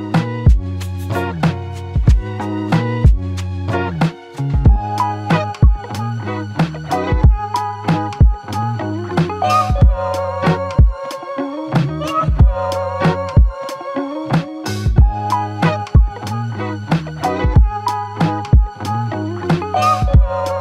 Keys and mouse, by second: 1.3 alt+click, 5.2 alt+click, 6.3 double click, 9.4 double click, 13.5 alt+click, 17.7 alt+click.